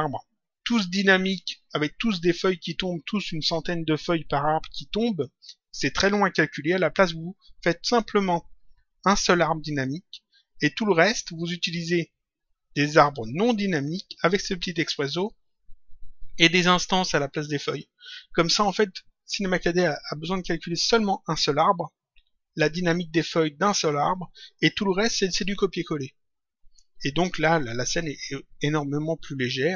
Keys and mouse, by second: 9.0 click, 11.3 click.